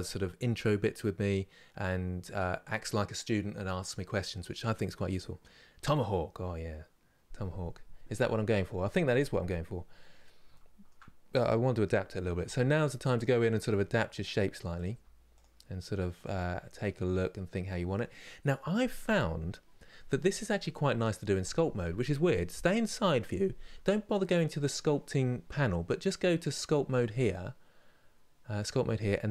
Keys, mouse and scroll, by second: 10.2 shift+middle click, 11.1 click, 12.1 g, 13.3 click, 13.4 g, 14.4 click, 14.6 g, 15.9 click, 16.0 g, 22.4 KP_3, 26.6-29.3 drag.